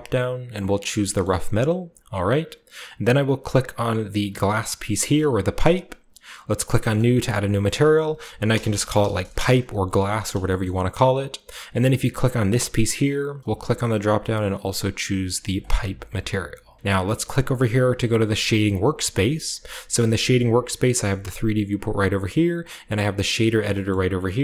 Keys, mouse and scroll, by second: 1.2-2.2 shift+middle drag, 2.2-3.3 scroll down 1, 3.3-4.8 scroll down 1, 3.4 right drag, 4.8 g, 5.2 right click, 6.7 click, 6.7 right click, 7.6 click, 8.4-9.0 typing, 9.3 Return, 10.4-12.5 shift+middle drag, 12.5 typing, 15.5 click, 18.3 click, 20.1-21.3 middle drag, 22.3 click, 23.5-24.4 scroll down 2.